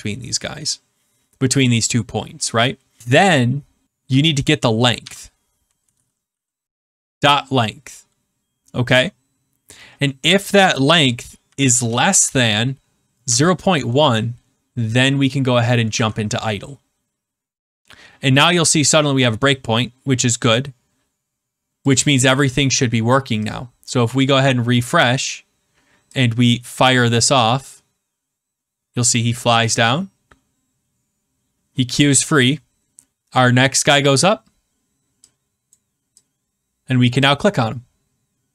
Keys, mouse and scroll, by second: 3.9 Right, 4.9-7.4 typing, 11.4 shift+,, 12.8-13.9 typing, 15.9 ctrl+s, 20.4 click, 21.9 click, 23.4 click, 24.2 click, 26.8 click, 35.7 click, 37.1 click.